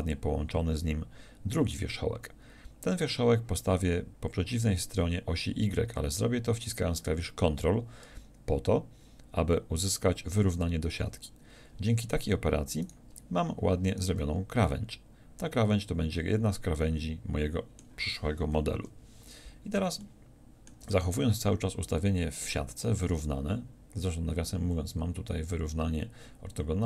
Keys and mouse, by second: 10.6-18.7 middle drag, 18.7 KP_7.